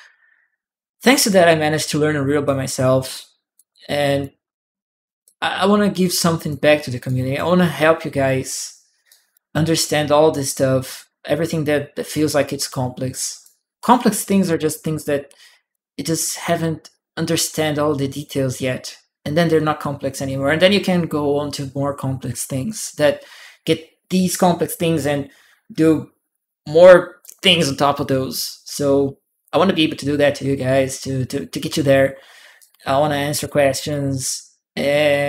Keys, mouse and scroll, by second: 0.1 shift+click, 1.6 click, 1.7-2.9 right drag, 3.3 click, 5.0-6.3 drag, 6.8 right click, 6.9 click, 8.9 right click, 9.4 click, 10.7-13.2 drag, 13.6 click, 13.9 right click, 14.6-16.0 right drag, 14.7 click, 32.4-33.7 right drag, 35.1 click.